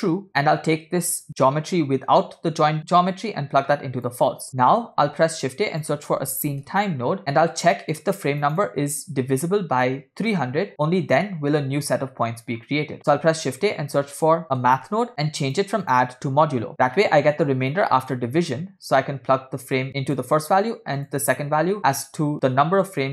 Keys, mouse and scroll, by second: 1.5-4.2 drag, 4.5 middle click, 5.1 shift+a, 8.0-8.5 drag, 12.6 scroll up 2, 13.1 shift+a, 15.9-16.7 drag, 16.8 scroll down 2, 17.0 middle click, 17.8 click, 19.1-20.3 drag, 20.5 scroll up 2, 21.0-23.1 drag.